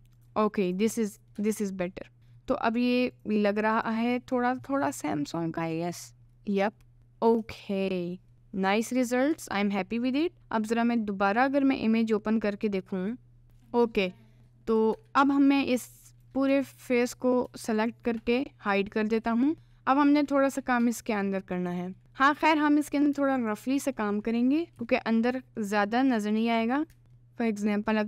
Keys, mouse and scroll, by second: 0.3 click, 0.7 click, 1.0 middle click, 1.4 Tab, 2.2 middle click, 2.3-2.9 scroll up 2, 2.6 middle click, 3.2 right click, 4.2 middle click, 5.0-6.0 middle drag, 6.4 middle click, 7.0 middle click, 7.4 Tab, 8.3 middle click, 9.4 Tab, 14.0 middle click, 14.5 middle click, 15.0 Tab, 15.3 middle click, 16.1 click, 16.7 alt+click, 17.8 shift+click, 19.1 h, 19.5 middle click, 20.6 middle click, 21.2 middle click, 22.0 middle click, 22.4 middle click, 23.4 alt+click, 24.1 middle click, 24.7 2, 24.9 middle click, 26.2 middle click, 27.0 middle click, 27.2 scroll up 1, 27.9 middle click.